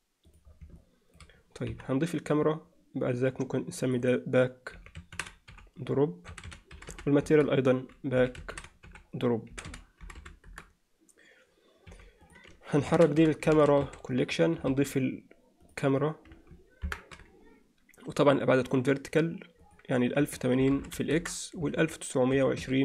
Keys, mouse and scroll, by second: 0.8-1.2 alt+middle drag, 1.7 KP_1, 4.1-7.4 drag, 7.6-10.7 drag, 11.9 m, 14.7 shift+a, 16.9 ctrl+alt+KP_0, 18.7 drag, 19.7-21.3 drag, 20.8 0, 21.7-22.8 drag.